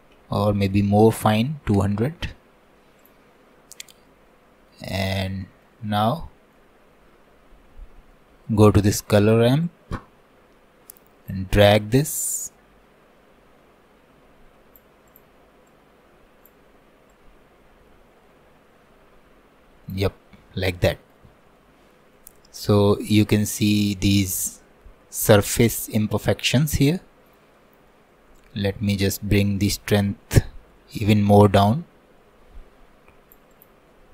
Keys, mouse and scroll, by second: 1.0 KP_0, 3.0 click, 3.6-4.1 scroll up 3, 4.1 middle click, 4.9-5.3 scroll up 1, 5.3 shift+middle click, 5.9 scroll down 1, 6.1-7.5 middle drag, 7.5-8.1 scroll up 5, 8.1-9.7 middle drag, 9.7-20.4 drag, 20.4-22.4 middle drag, 22.4-23.0 scroll up 1, 23.0-29.4 middle drag, 29.4-32.4 drag, 33.5-34.1 drag.